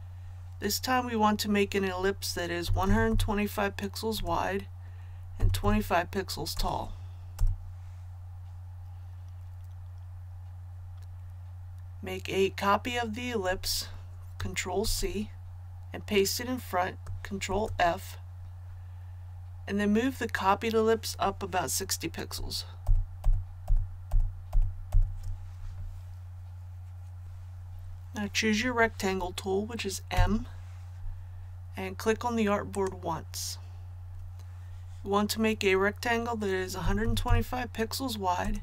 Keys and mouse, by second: 2.6 KP_1, 2.8 KP_2, 3.0 KP_5, 4.1 Tab, 5.3 KP_2, 5.6 KP_5, 6.5 Tab, 14.8 ctrl+c, 17.4 ctrl+f, 22.8 shift+Up, 23.2 shift+Up, 23.6 shift+Up, 24.0 shift+Up, 24.5 shift+Up, 24.9 shift+Up, 27.2 click, 30.1 m, 32.7 click, 36.8 KP_1, 37.0 KP_2, 37.2 KP_5, 38.4 Tab.